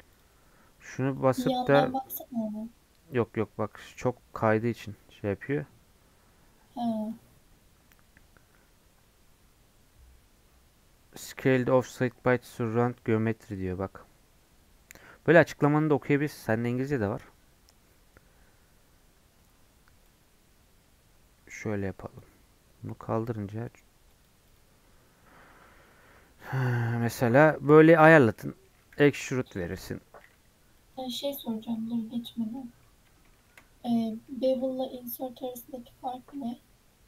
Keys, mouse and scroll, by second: 0.1-4.2 drag, 20.1-26.3 drag, 26.3 scroll down 4, 26.5-28.1 middle drag, 28.1 scroll up 1, 28.4 middle click, 28.9 e, 30.3 Tab, 30.8 click, 31.1 middle click, 32.0 scroll down 1, 32.3 Tab, 32.6 middle click, 32.8-33.3 scroll up 2, 33.3-36.6 shift+middle drag, 36.6 ctrl+z.